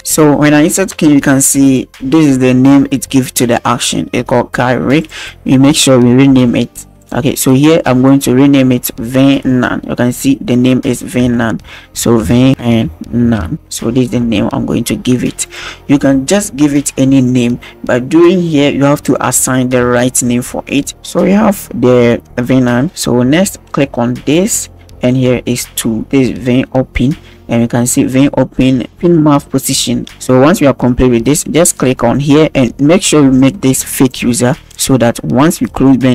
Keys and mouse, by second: 1.7-5.1 drag, 7.0-15.5 drag, 24.4 click, 34.0 click.